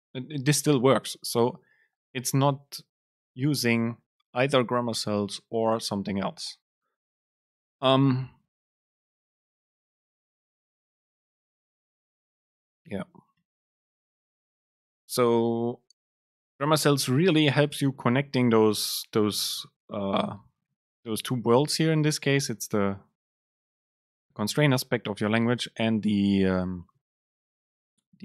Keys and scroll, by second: 13.5 BackSpace.